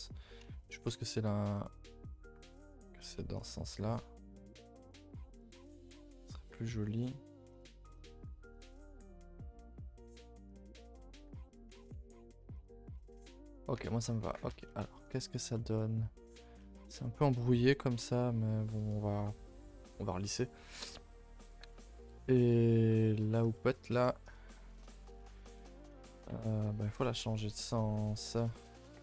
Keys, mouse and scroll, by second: 1.0 z, 1.6 click, 3.5 z, 3.7 g, 5.4 click, 5.5 g, 6.3 click, 6.4 g, 8.1 click, 8.2 g, 8.9 click, 8.9 g, 10.9 click, 11.2 g, 12.3 z, 12.6 click, 13.6 z, 13.8 Tab, 14.1 a, 14.2 a, 14.6 middle click, 14.9-15.5 scroll up 8, 15.5 middle drag, 16.0 middle drag, 16.3 scroll up 2, 16.6-21.8 shift+middle drag, 21.8 Left, 22.1 KP_0, 23.0 shift+middle drag, 23.2-23.9 scroll up 3, 23.5 shift+middle drag, 23.9 Tab, 24.2 scroll down 1, 24.5 shift+middle click, 24.8 scroll down 1, 24.9 a, 25.0 a, 25.1-25.4 scroll up 2, 25.4 shift+middle click, 25.6-26.3 scroll down 1, 26.3 Tab, 26.7 Tab, 27.4 z, 28.1 z, 28.4 shift+middle click, 28.7 scroll up 1, 28.9-29.0 scroll down 1.